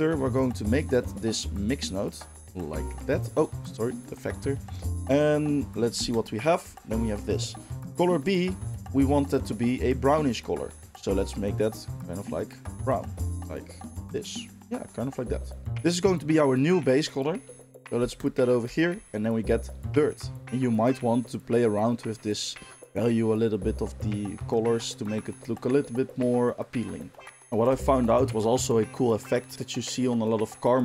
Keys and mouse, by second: 6.2-9.3 ctrl+shift+middle drag, 9.3 click, 9.5-15.7 middle drag, 15.7-18.4 drag, 18.4-21.2 ctrl+shift+middle drag, 21.2 click, 21.4-28.2 middle drag.